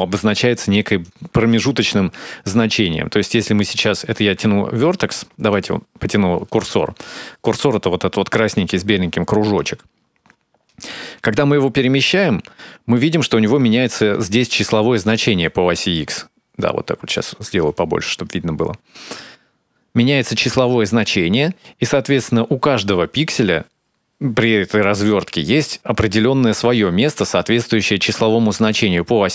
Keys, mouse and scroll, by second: 2.5 shift+click, 4.9 ctrl+z, 6.5 click, 10.5 shift+click, 16.9 ctrl+middle click, 18.7 shift+click.